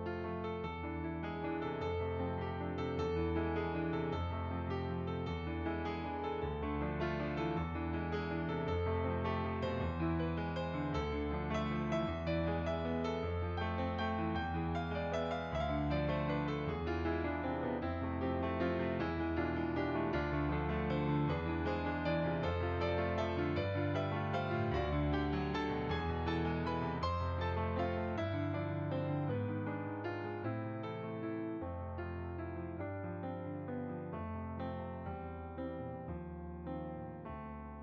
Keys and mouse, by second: 0.0 click, 0.3 middle click, 1.0 click, 4.3 click, 5.2 click, 12.7 f, 12.8 click, 16.9 f, 17.1 click, 17.8 f, 17.9 click, 19.1 shift+click, 23.1 click, 23.7 click, 23.8 e, 23.8 click, 27.8 click, 30.3 middle click, 31.6 click, 32.3 middle click, 34.6 click, 35.6 shift+middle click.